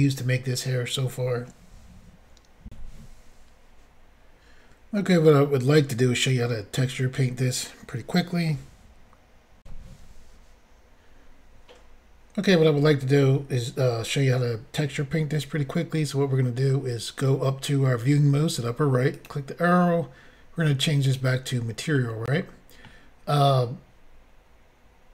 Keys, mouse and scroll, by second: 2.7 Insert, 9.6 Insert, 19.2 click, 21.1 click, 22.0 middle click.